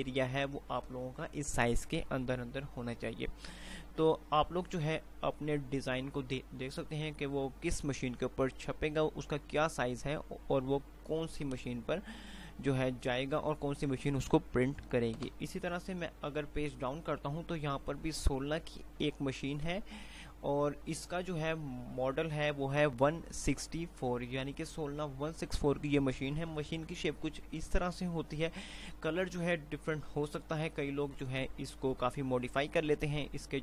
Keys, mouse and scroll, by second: 0.0 F5, 16.0 Page_Down.